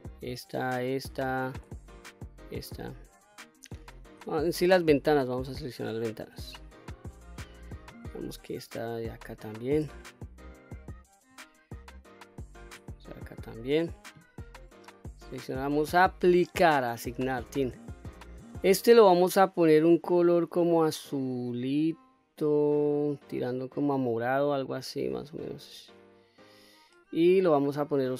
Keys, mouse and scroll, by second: 0.0 shift+click, 0.8 shift+click, 1.3 middle click, 2.3 shift+click, 2.9 shift+click, 3.4 shift+click, 3.9 shift+click, 4.4 middle click, 5.5 shift+click, 6.0 shift+click, 6.5 scroll up 1, 7.0 middle click, 7.7-8.1 scroll up 2, 9.1 shift+click, 10.1-10.5 scroll down 1, 10.5 middle click, 12.3 shift+click, 13.0-13.4 scroll down 1, 13.4 middle click, 15.2 click, 17.0 click, 18.5 click.